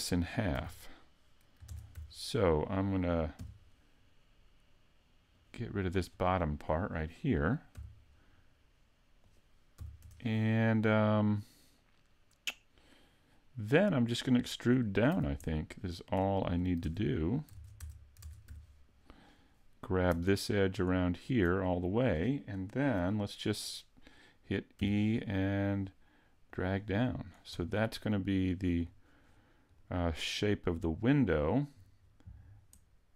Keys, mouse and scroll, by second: 0.5 a, 1.6 ctrl+Tab, 3.4 b, 7.7 x, 9.8 a, 10.0 Tab, 10.3-10.7 scroll down 2, 10.7 middle click, 15.1 z, 15.4 middle click, 16.8 ctrl+Tab, 17.5 ctrl+Tab, 18.2 ctrl+Tab, 20.7 alt+right click, 21.6 middle click, 24.8 e, 25.1 click, 26.5 click, 27.5-28.0 scroll down 4, 28.0 middle click, 28.4 middle click, 28.8-29.7 scroll down 4, 29.8 middle click, 32.0-32.5 scroll down 1.